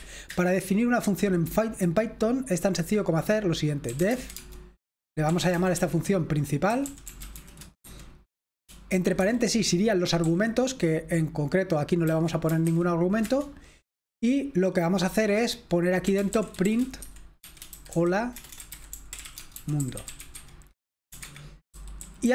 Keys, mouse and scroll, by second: 0.0 typing, 0.2 Return, 3.7-7.8 typing, 9.2 Escape, 10.2 l, 12.1-12.6 typing, 13.2 Return, 15.8-22.2 typing, 21.2 Escape.